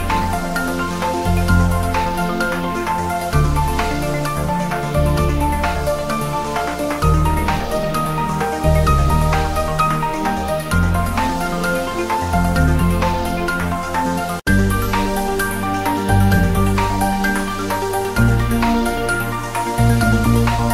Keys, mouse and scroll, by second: 1.0 scroll down 1, 1.3 scroll up 1, 1.4 click, 1.8 scroll down 1, 2.6 Tab, 2.7 scroll down 1, 3.6 ctrl+3, 4.0 Tab, 4.5 scroll down 1, 5.2 click, 9.0 click, 9.2-9.5 scroll down 1, 10.6 s, 11.2 z, 14.4 z, 16.1 z.